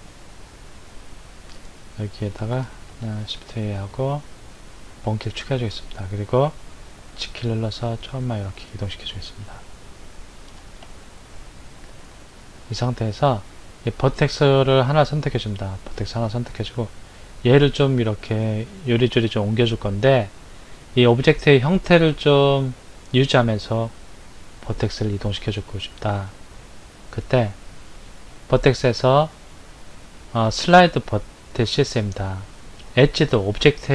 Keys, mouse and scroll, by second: 3.1 shift+a, 6.9 g, 10.7-11.8 shift+middle drag, 11.8-13.1 scroll up 6, 14.8 click, 28.0-31.2 drag.